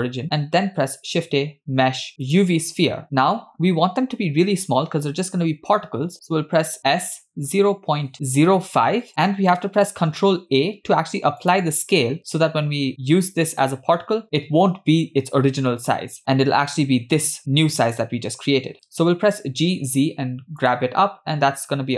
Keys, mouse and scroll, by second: 0.6 shift+a, 3.3 s, 10.3 ctrl+a, 18.6 g.